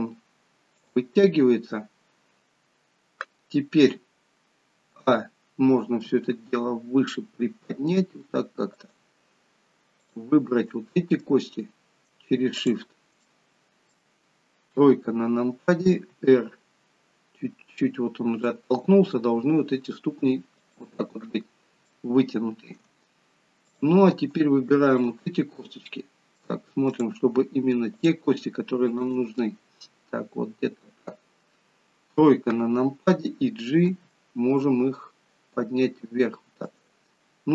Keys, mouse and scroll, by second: 5.0 a, 6.2 g, 10.1 click, 10.7 middle click, 12.6 shift+click, 13.3 middle click, 14.8 KP_3, 16.2 r, 21.9 shift+middle click, 23.7 click, 25.0 shift+click, 25.6 middle click, 27.0 click, 28.0 click, 29.4 middle click, 32.2 KP_3, 33.9 g.